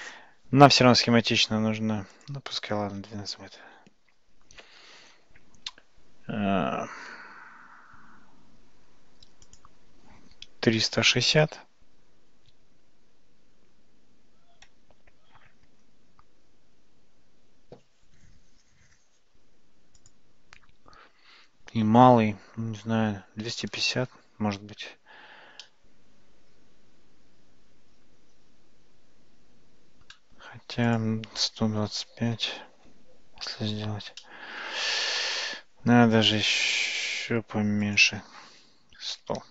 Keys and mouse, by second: 2.1-5.0 drag, 9.5-16.1 drag, 20.0-24.7 drag, 25.7-30.1 middle drag, 30.9-33.4 drag, 34.2-35.6 middle drag, 37.9-39.5 drag.